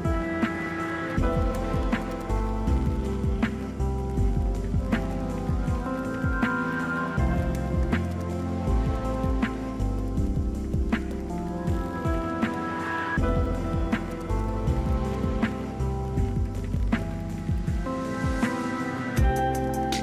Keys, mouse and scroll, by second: 2.8 right click, 10.4 ctrl+click, 11.8 ctrl+-, 12.3 ctrl+-, 12.5 ctrl+t, 13.9 alt+click.